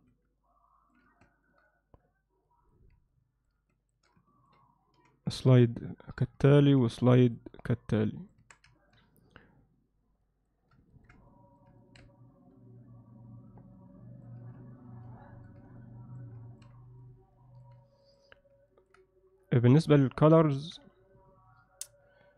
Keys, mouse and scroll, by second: 0.4 alt+middle click, 1.2 alt+shift+middle click, 2.5 click, 3.1 alt+middle click, 3.7 alt+shift+middle click, 4.3 ctrl+alt+middle click, 5.0 g, 6.7 ctrl+r, 8.4 Tab, 8.8 ctrl+alt+middle click, 10.3 click, 10.9 ctrl+alt+middle click, 11.3-11.6 alt+middle drag, 11.8 ctrl+alt+middle click, 12.6 KP_Divide, 13.8-14.3 middle drag, 14.4 alt+a, 14.7-15.5 alt+middle drag, 15.8 alt+middle click, 16.5 ctrl+middle click, 17.0-17.7 alt+middle drag, 18.1 click, 18.7 ctrl+alt+middle click, 20.6 Tab.